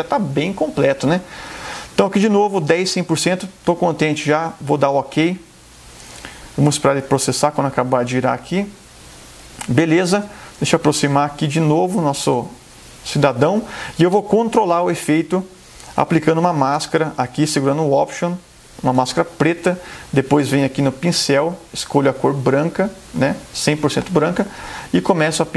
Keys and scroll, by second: 10.3 super+=, 12.2 super+space.